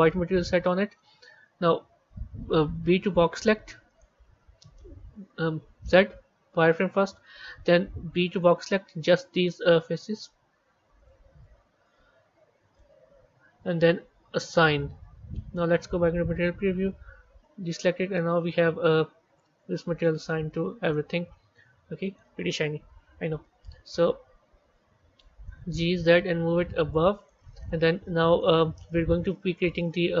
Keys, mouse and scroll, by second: 0.0-1.1 middle drag, 1.1 KP_1, 14.4 click, 18.0 middle click, 19.3 middle click, 20.2 Tab, 20.7 scroll down 1, 20.8-22.5 middle drag, 22.5 KP_1, 23.3 z, 24.1 z, 25.4 g, 28.5-29.2 scroll down 1, 29.2-30.2 middle drag.